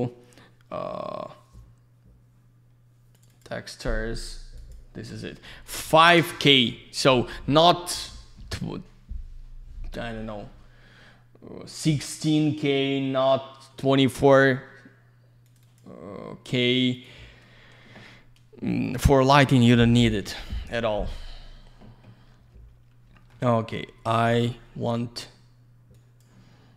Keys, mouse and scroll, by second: 3.1 click, 3.2 click, 3.3 click, 3.4 double click, 4.6 click, 4.7 click, 15.4 click, 15.6 click, 16.9 click, 17.0 click, 23.1 middle click, 24.5 click, 25.9 click.